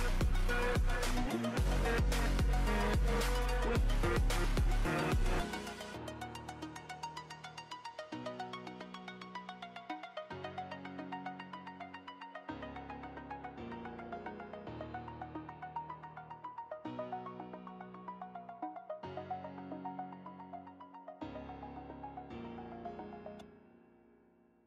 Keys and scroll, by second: 1.6 ], 2.9 ], 3.3 ctrl+z, 5.5 ctrl+z, 5.8 [, 6.2 ctrl+z, 12.4 ctrl+z, 12.9-14.7 typing, 13.4 ctrl+z, 14.0 ctrl+z, 16.0 [, 16.4 [, 17.7 ], 18.5 ], 23.7 ctrl+z, 24.5 ctrl+z.